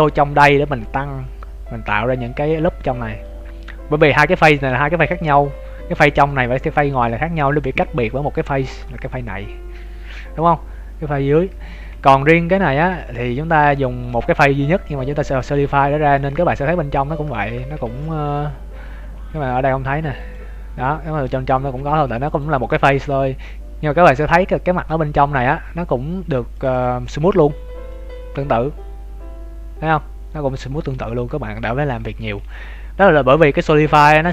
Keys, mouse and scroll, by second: 0.6 Tab, 1.2 scroll up 1, 2.4 alt+right click, 3.8 scroll down 2, 4.6 scroll down 5, 4.7 Tab, 5.1 middle click, 5.4 Tab, 6.2 middle click, 6.9 scroll down 1, 7.5 middle click, 7.5 scroll down 1, 8.2 scroll up 1, 8.5 z, 8.8 shift+middle click, 10.2 z, 11.4 z, 11.6-11.9 scroll down 4, 11.8 Tab, 12.2 right click, 12.5 Tab, 12.8 z, 12.9 middle click, 13.8 shift+middle click, 14.2 Tab, 15.4 scroll up 2, 15.6 z, 15.7 middle click, 16.2 z, 16.4 scroll up 1, 16.9 scroll up 4, 16.9 z, 17.3 middle click, 17.6 z, 17.8 Tab, 18.6 Tab, 19.0 Tab, 20.1 click, 23.3 scroll down 3, 23.7 scroll up 3, 25.4 scroll up 4, 26.5 click, 27.5 scroll down 3, 27.8 middle click, 31.0-31.4 scroll up 6, 32.0 Tab, 32.2-33.7 scroll down 12.